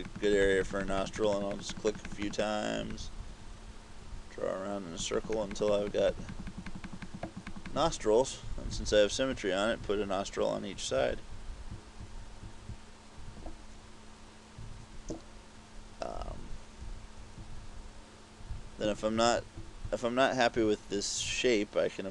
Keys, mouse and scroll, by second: 0.3 click, 0.4 click, 0.6 click, 0.8 click, 1.0 click, 1.1 click, 1.3 click, 1.5 click, 1.7 click, 1.8 click, 2.1 click, 2.2 click, 2.4 click, 2.6 click, 3.0 click, 5.3 click, 5.4 click, 5.6 click, 5.7 click, 6.0 click, 6.2 click, 6.4 click, 6.6 click, 6.7 click, 6.9 click, 7.1 click, 7.3 click, 7.6 click, 7.8 click, 8.5-12.5 typing, 16.9 KP_3, 17.5 KP_5, 18.5 KP_5, 19.0 KP_Subtract, 19.2 KP_Subtract, 19.4 KP_Subtract, 19.6 KP_Subtract.